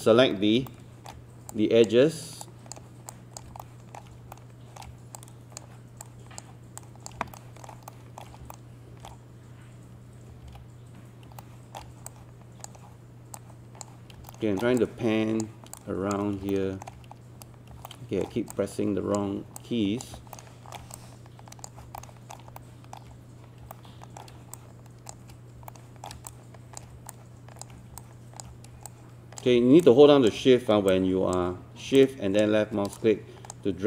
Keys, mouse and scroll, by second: 0.7 alt+middle click, 1.5 shift+click, 2.4 shift+click, 3.1 shift+click, 3.6 alt+shift+middle click, 4.3 alt+middle click, 5.2 shift+click, 6.8 shift+click, 7.4 alt+shift+middle click, 7.9 alt+middle click, 8.5 alt+super+middle click, 10.5 ctrl+z, 11.4 alt+middle click, 12.1 shift+click, 13.4 shift+click, 14.3 alt+middle click, 14.8 shift+click, 15.8 shift+click, 16.5 alt+shift+middle click, 17.9 alt+middle click, 18.5 shift+click, 19.6 shift+click, 20.3 alt+middle click, 21.0 shift+click, 22.0 alt+shift+middle click, 22.6 alt+middle click, 23.7 alt+middle click, 24.6 shift+click, 25.7 alt+middle click, 26.3 shift+click, 27.1 alt+click, 28.0 alt+click, 28.9 shift+click, 29.8 alt+click, 30.9 shift+click, 32.0 shift+click, 32.9 shift+click.